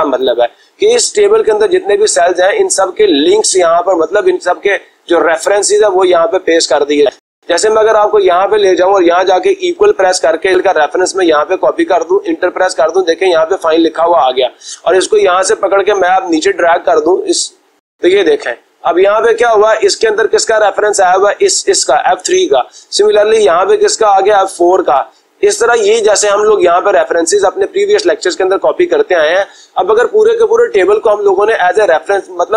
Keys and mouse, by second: 3.2-4.3 drag, 5.3-6.3 drag, 6.5-7.5 drag, 7.7-8.8 drag, 9.8 =, 11.7 click, 12.6 Return, 14.8-15.8 drag, 17.4-18.5 drag, 18.9 click, 20.2 click, 23.3 click, 25.4 click, 26.0 click, 26.5 click, 26.8 click, 29.1 click, 30.0 Delete, 31.9-32.5 drag.